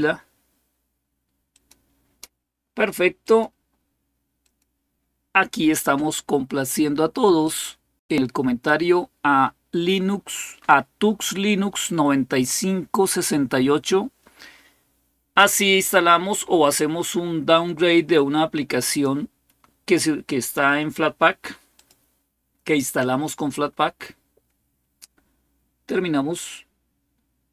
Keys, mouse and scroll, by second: 1.3 click, 1.8 click, 3.0 click, 4.2 click, 4.8 click, 7.2 click, 17.2-22.6 drag, 27.4 click.